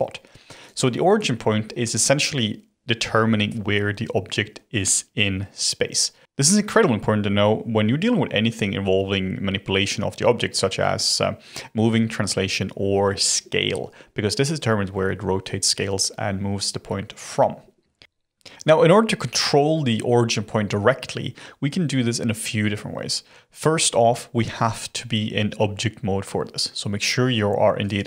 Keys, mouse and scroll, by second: 27.8 click.